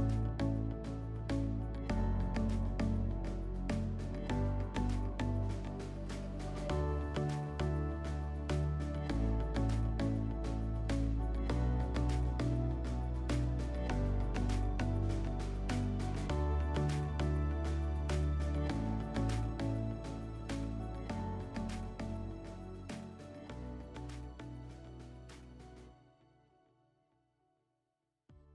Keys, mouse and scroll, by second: 0.8 alt+middle click, 1.7 click.